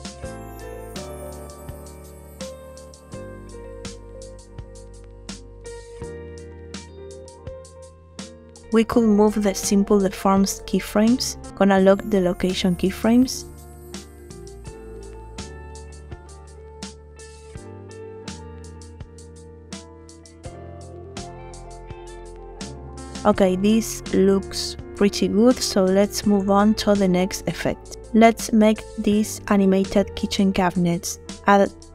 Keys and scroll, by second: 2.4 space, 21.4 space, 23.5 space.